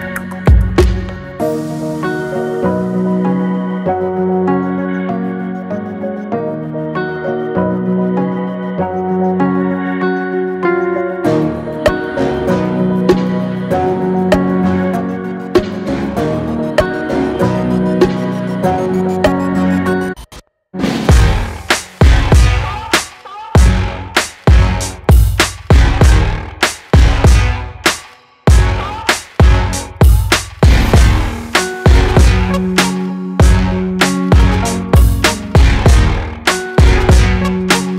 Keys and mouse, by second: 15.5 KP_3, 34.4-37.8 drag.